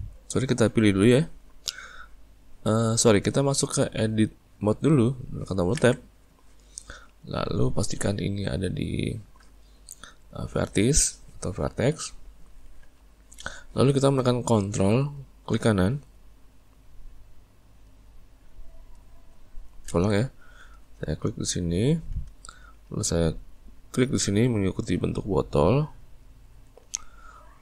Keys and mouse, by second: 1.0 click, 2.0 click, 17.8 right click, 21.7 right click, 24.1 right click, 26.2 right click.